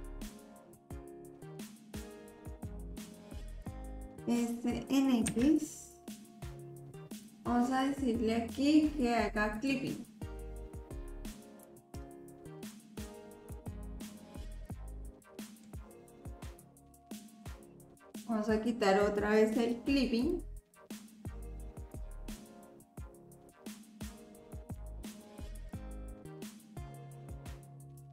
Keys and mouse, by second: 3.9 s, 9.6 click, 11.7-13.6 drag, 14.4-15.7 middle drag, 16.7 click, 17.5 ctrl+z, 20.2 click, 21.9-24.8 drag, 25.6-26.9 drag, 26.9-28.1 middle drag.